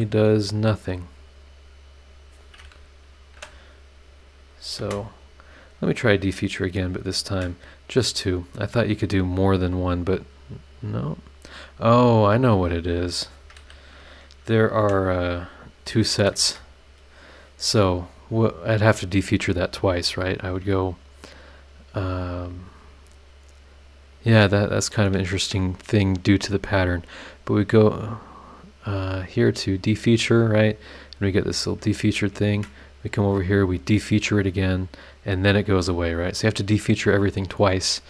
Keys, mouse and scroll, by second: 2.0 click, 3.3 Delete, 3.9 middle click, 4.5 click, 4.8 space, 5.5 scroll up 2, 5.8 click, 6.2 scroll up 2, 6.8 click, 7.2 ctrl+click, 8.3 click, 12.9 click, 14.8 Delete, 15.9 click, 16.3 space, 24.0 click, 24.8 click, 25.3 ctrl+click, 29.6 click, 31.9 click, 32.4 ctrl+click, 33.5 click, 35.0 scroll down 2, 35.5 scroll down 2.